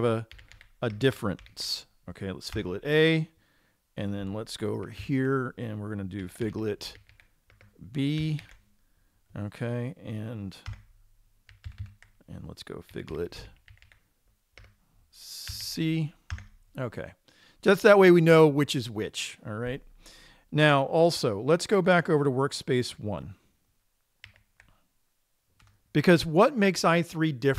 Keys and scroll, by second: 5.5 super+Right, 10.3 typing, 11.1 Return, 13.6-14.4 typing, 16.7 Return, 16.7 typing, 24.7 super+1.